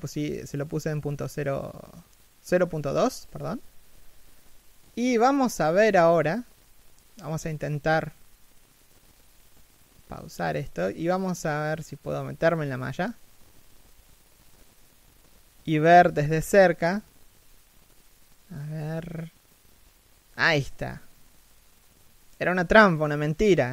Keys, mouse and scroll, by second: 3.2 Escape, 6.1 shift+middle click, 8.0 shift+middle click, 9.2-9.6 scroll down 1, 10.2 shift+middle click, 10.8 shift+f, 19.2 shift+f.